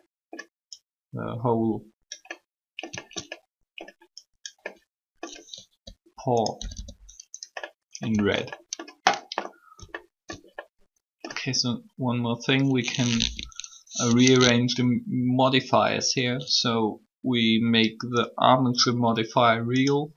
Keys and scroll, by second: 5.5-6.7 typing.